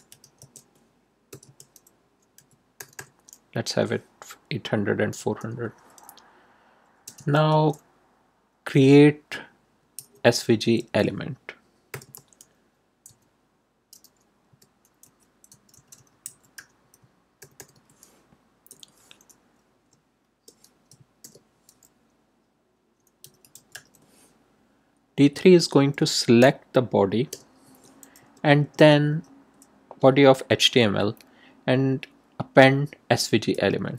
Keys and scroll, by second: 0.0-2.7 typing, 5.1 Return, 6.8-8.7 typing, 9.9 v, 10.3 g, 10.6 space, 11.9 =, 12.0 space, 13.0 d, 14.4-18.6 typing, 21.2 shift+", 22.9-24.2 typing, 25.1 Right, 27.2 Return, 28.6 Tab, 33.2-33.9 typing.